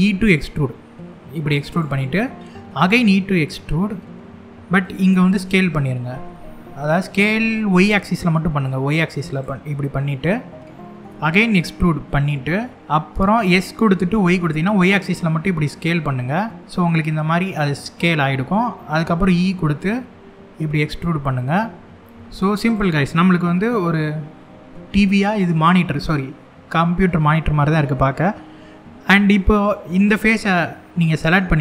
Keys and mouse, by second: 1.3 click, 2.4 e, 4.5 click, 5.1 s, 7.4 y, 9.0 click, 9.3-10.3 middle drag, 10.8 e, 12.9 s, 13.9 y, 17.7 middle click, 18.8 e, 22.3 click, 22.7-25.0 middle drag, 27.3 middle click, 29.6 click, 30.8 middle click.